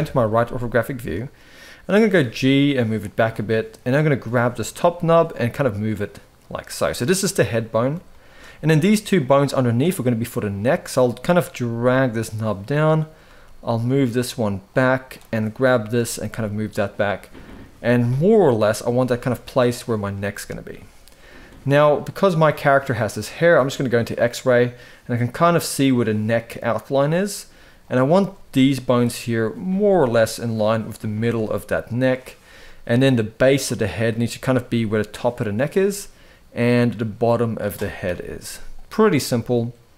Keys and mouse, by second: 0.6 shift+middle click, 1.7 g, 3.7 click, 4.1-4.5 shift+middle drag, 4.9 g, 6.9 click, 7.9 shift+middle click, 10.3 click, 11.2 g, 12.8 click, 13.0 g, 14.9 click, 15.7 g, 17.2 click, 17.5 g, 18.2 click, 18.7 g, 27.7 click, 28.3 g, 29.2 click, 29.4 g, 30.9 g, 32.4 shift+middle drag, 34.2 g, 35.6-36.6 middle drag, 37.8 KP_3, 38.9 shift+middle drag, 39.7 click.